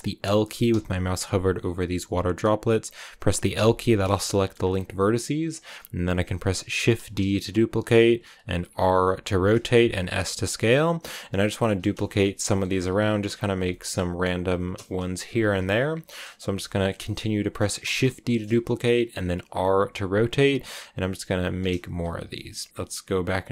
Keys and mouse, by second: 1.1 l, 4.1 l, 4.2 shift+click, 6.7 shift+d, 7.8 click, 8.6 r, 9.6 click, 9.9 s, 10.4 click, 10.5 r, 10.7 click, 10.8 g, 11.3 click, 12.6 r, 12.9 click, 13.0 g, 13.3 click, 13.6 shift+click, 14.6 shift+d, 15.2 click, 15.3 r, 15.7 click, 15.8 g, 16.2 click, 16.7 shift+d, 17.6 click, 17.9 shift+middle click, 19.6 r, 21.0 click, 21.1 g, 21.5 click, 21.8 s, 22.1 click, 22.2 g, 22.3 click, 22.8 z.